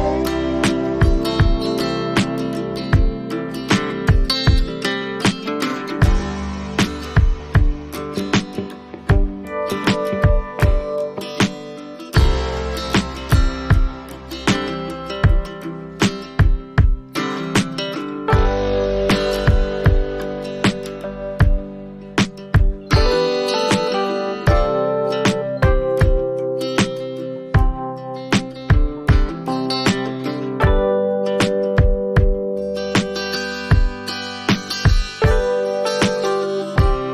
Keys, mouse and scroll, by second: 0.5 click, 1.2 click, 3.5 click, 7.6 click, 12.9 click, 14.2 click, 15.2 click, 15.9 click, 16.8 click, 18.5 click, 19.4 click, 20.3 click, 22.7 click, 23.4 click, 23.8 click, 26.0 click, 27.3 click, 28.4 click, 31.0 click, 33.2 click, 35.0 click.